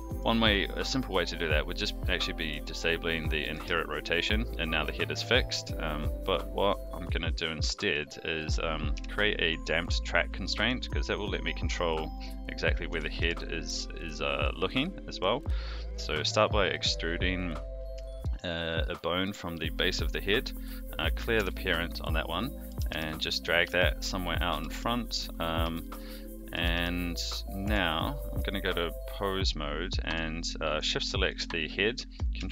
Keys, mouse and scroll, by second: 0.1 click, 1.0 click, 2.3 click, 3.0 click, 3.4 r, 5.9 click, 7.2 click, 7.7 shift+middle drag, 8.2 middle click, 8.9 KP_3, 10.6 click, 11.3 click, 11.6 Tab, 12.9 e, 18.1 shift+middle click, 21.3 alt+p, 22.6 g, 23.7 shift+middle click, 24.5 g, 25.7 shift+middle click, 26.5 g, 27.6 Tab, 28.3 click, 30.7 shift+click.